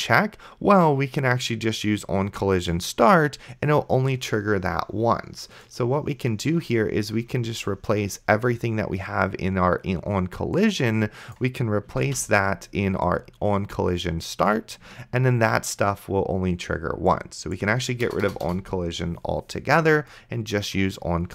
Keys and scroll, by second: 12.3 ctrl+x, 15.7 ctrl+v, 18.1 BackSpace.